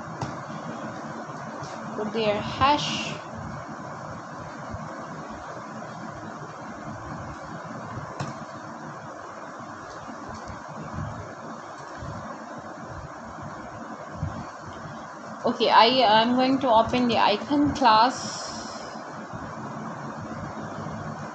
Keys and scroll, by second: 0.7-1.9 typing, 3.6 Return, 5.8 shift+', 7.3 Left, 8.0 f, 8.3 a, 10.5-14.1 typing.